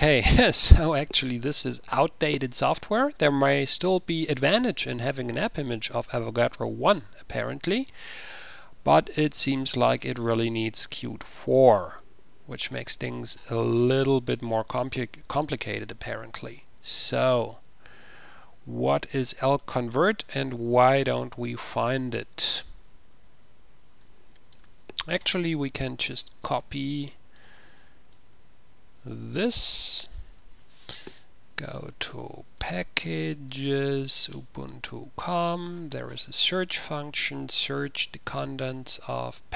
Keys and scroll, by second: 30.7 ctrl+c, 32.2 ctrl+a, 32.5-33.7 typing, 34.4 Return, 38.9 c.